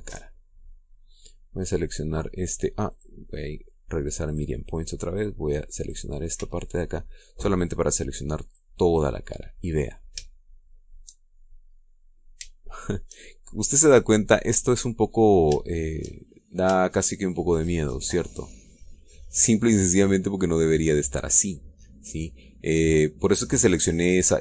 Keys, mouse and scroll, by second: 3.6 click, 5.0 click, 6.5 click, 7.1 b, 7.6-9.5 drag, 10.4-11.0 scroll up 3, 11.0 shift+middle click, 12.4-13.1 scroll up 2, 13.3 shift+middle click, 13.8 shift+scroll up 2, 14.2 shift+scroll down 3, 14.7-16.2 drag, 16.2 shift+middle click, 17.0-17.5 shift+scroll up 1, 17.5-19.2 shift+middle drag, 19.3-24.4 middle drag.